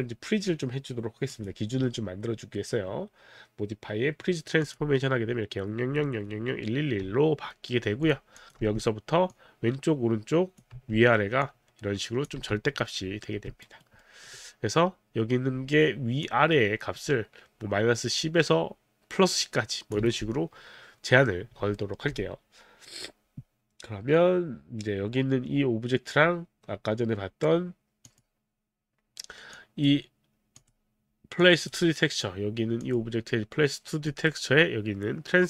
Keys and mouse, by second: 1.3 click, 4.7 click, 8.1 click, 8.4 click, 8.6 w, 10.8 z, 11.4 click, 12.4 z, 13.6 alt+right click, 14.0 alt+middle click, 16.3 click, 20.0 z, 21.7 alt+middle click, 28.1 click, 29.5 click, 30.6 click, 32.8 click, 34.1 click.